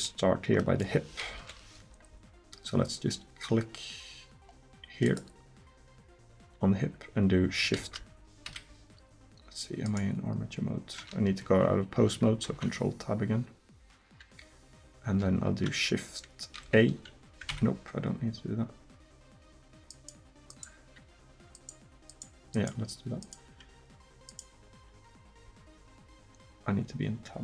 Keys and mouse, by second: 1.4 KP_1, 5.1-7.0 drag, 7.8 shift+a, 9.9-11.4 right drag, 12.5 ctrl+Tab, 16.6 shift+a, 25.5 Tab.